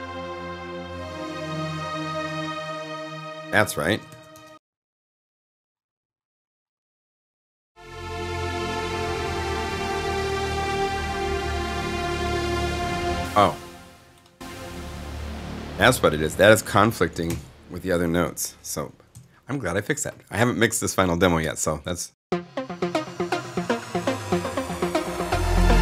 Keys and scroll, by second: 2.3 space, 4.0 alt+s, 4.3 alt+0, 4.5 Return, 12.9 space, 17.2 BackSpace, 19.1 s, 21.3 0, 22.0 Home.